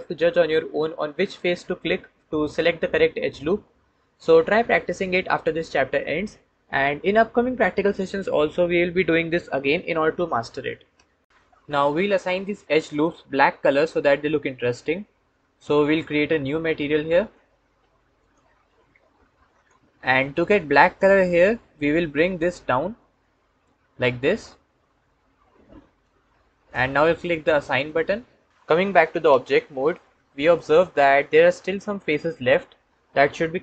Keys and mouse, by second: 12.0-15.8 drag, 18.1 click, 27.6 click, 29.1 Tab, 30.4-33.6 drag.